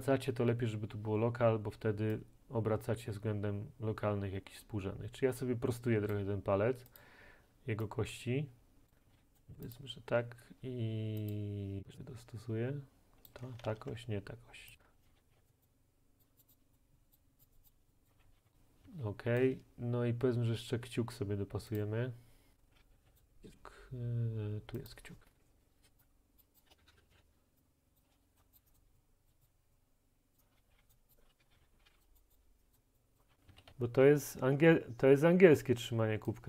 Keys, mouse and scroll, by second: 6.1 middle click, 7.0 click, 8.9 right click, 9.0 typing, 9.4 click, 9.8 click, 13.7 ctrl+z, 14.8 click, 15.1-15.4 typing, 15.5 right click, 16.2 right click, 16.4 click, 16.5 click, 17.1 click, 17.4 click, 17.6 click, 17.7 click, 18.1 click, 18.1-18.9 typing, 19.4 right click, 21.8 click, 22.5-23.2 typing, 23.2 right click, 25.0 click, 26.4 click, 26.6 click, 26.7 Right, 26.8 Down, 26.9 Right, 27.0 Down, 27.1 Right, 27.2 Up, 28.0 click, 28.1 w, 28.1 a, 28.4 click, 28.6 click, 28.8 click, 29.5 middle click, 30.4 middle click, 30.4-34.2 typing, 30.9 middle click, 31.3 right click, 32.3 right click, 32.7 right click, 33.6 right click, 36.3 right click.